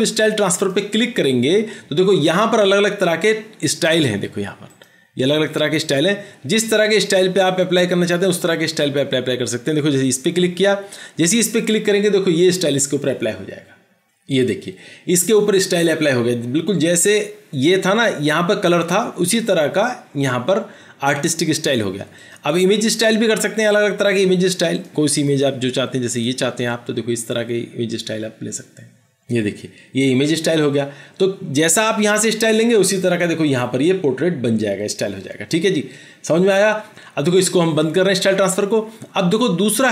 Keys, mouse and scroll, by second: 5.9 double click.